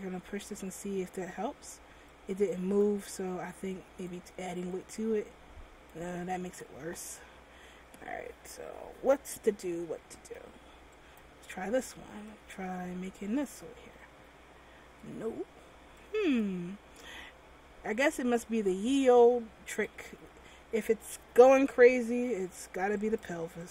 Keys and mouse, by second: 7.2 ctrl+z, 10.4 m, 11.7 m, 14.3 ctrl+z, 18.7 ctrl+z, 20.0 a, 22.5 m.